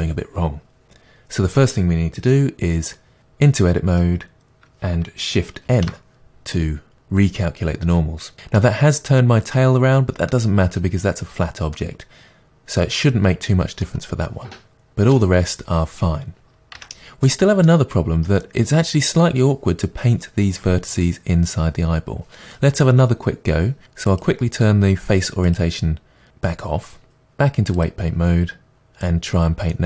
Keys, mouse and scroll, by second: 3.2 Tab, 5.7 shift+n, 8.6-24.1 middle drag, 16.8 Tab, 17.9-22.1 scroll up 2, 24.1-29.7 drag, 29.7-29.8 middle drag.